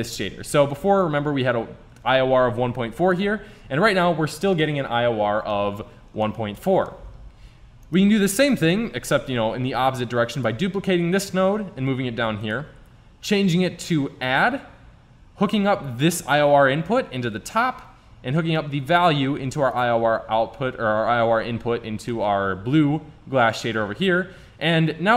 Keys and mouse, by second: 1.2-3.1 drag, 4.7-5.8 middle drag, 7.9 right click, 8.8 shift+d, 9.8 click, 12.5 click, 13.4-14.4 drag, 16.0-17.9 drag, 18.8-20.6 drag, 22.1-25.1 middle drag.